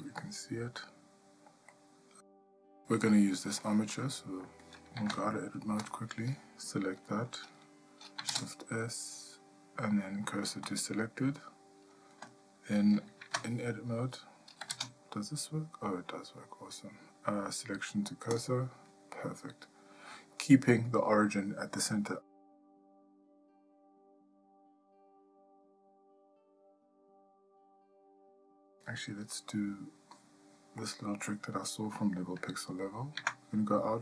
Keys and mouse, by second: 1.7 ctrl+middle click, 3.6 middle click, 5.0 Tab, 5.9 click, 8.3 shift+s, 13.2 Tab, 14.7 shift+s, 23.4 click, 25.7 ctrl+middle click, 26.6 shift+middle click, 30.8 middle click, 31.6 shift+middle click, 33.2 Tab.